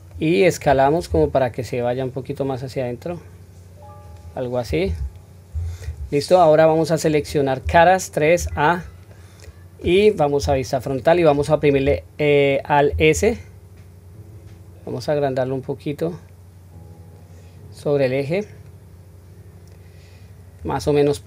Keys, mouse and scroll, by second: 0.1-1.0 middle drag, 1.0 s, 6.3-7.1 middle drag, 7.6 3, 8.3 a, 9.1-9.7 middle drag, 10.4 KP_1, 10.8 scroll up 1, 12.9 alt+s, 21.1-21.2 middle drag.